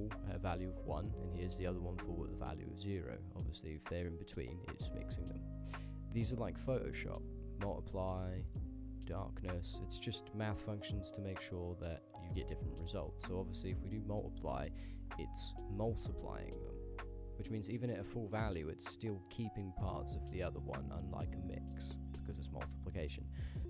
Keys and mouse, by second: 0.6 click, 3.2 ctrl+click, 6.2-6.9 drag, 7.5-8.1 drag, 9.1-9.7 drag, 10.6-12.0 drag, 13.0-13.9 drag, 15.2-17.7 drag, 18.5 shift+middle drag, 20.3 shift+click, 20.9 shift+click, 21.4-21.8 ctrl+drag, 23.1-23.6 drag.